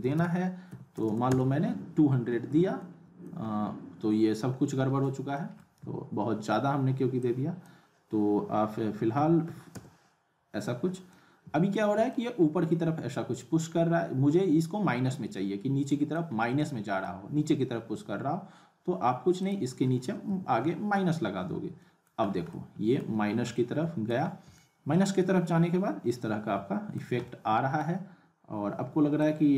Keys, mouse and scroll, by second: 2.6 click, 2.8-3.4 alt+middle click, 3.5-3.9 scroll down 1, 5.3 middle click, 5.8 ctrl+z, 7.3-7.8 drag, 10.8 click, 11.1-11.7 alt+middle click, 11.7-12.1 scroll up 2, 12.1-16.2 alt+middle drag, 16.3 scroll up 2, 16.6-17.2 alt+middle drag, 19.4 click, 22.3 scroll down 1, 22.5-23.1 alt+middle click, 23.2 scroll up 1, 23.5-24.1 alt+middle click, 24.2-24.6 scroll up 1, 24.6-27.1 middle drag, 27.2-27.9 alt+middle drag, 29.2-29.5 drag.